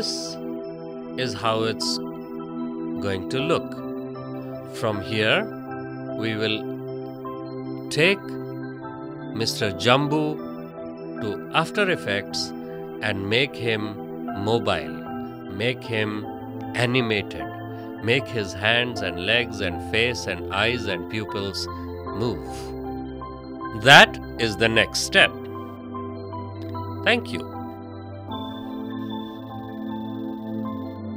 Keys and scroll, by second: 3.4 space, 16.6 space, 25.4 space.